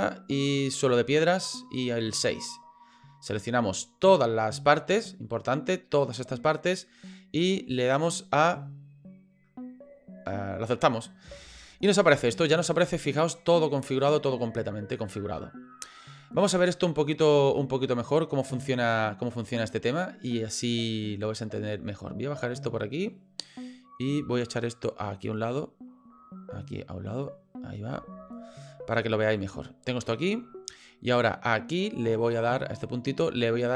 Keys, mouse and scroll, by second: 13.1 middle click, 22.0 click.